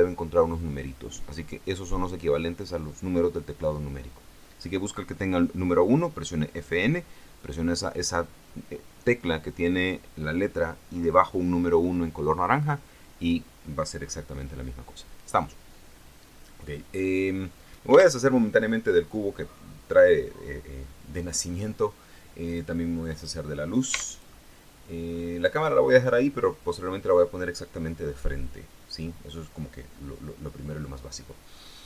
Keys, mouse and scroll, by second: 18.3 x, 18.4 click, 21.7-22.2 scroll up 1, 22.3-22.7 scroll down 1, 23.5 right click, 24.3 x, 24.5 click, 25.0-25.4 scroll down 2, 25.9 scroll up 2.